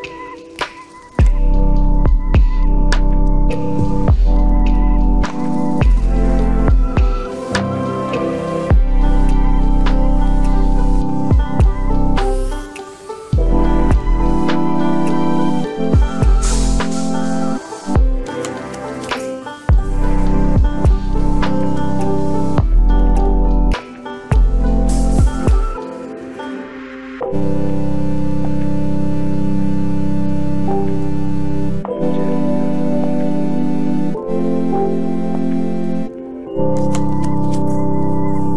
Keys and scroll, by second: 19.2 ctrl+t, 29.0 ctrl+j, 29.5 ctrl+t.